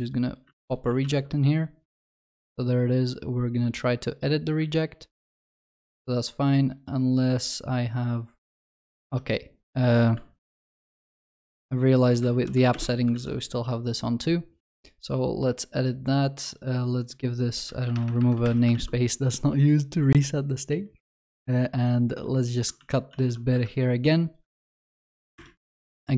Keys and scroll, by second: 10.4 ctrl+shift+n, 13.2 ctrl+s, 18.5 ctrl+y, 22.8 ctrl+x, 23.1 ctrl+s.